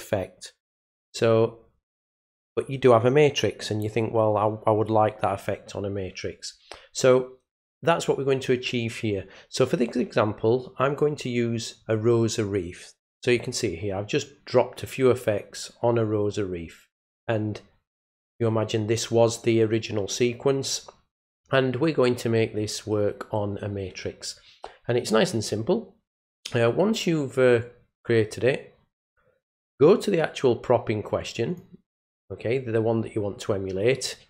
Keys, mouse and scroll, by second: 10.9 click, 31.5 click.